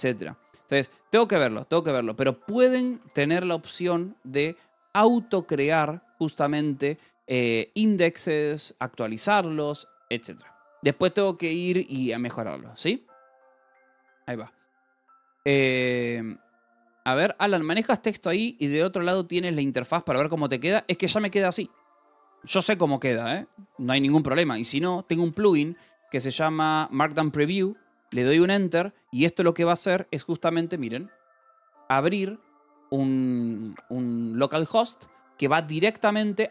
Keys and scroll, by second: 0.0-3.0 typing, 5.7 Escape, 6.1 j, 6.4 k, 7.0 j, 8.3 Escape, 10.1 k, 10.7 j, 11.8 ctrl+s, 21.5-22.9 typing, 24.7-26.6 typing, 28.0 Return.